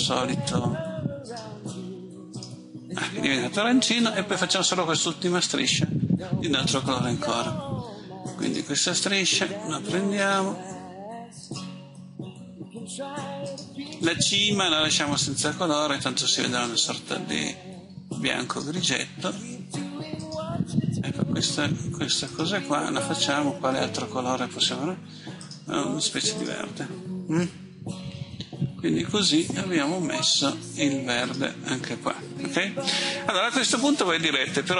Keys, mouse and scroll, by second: 4.0 click, 22.3 click.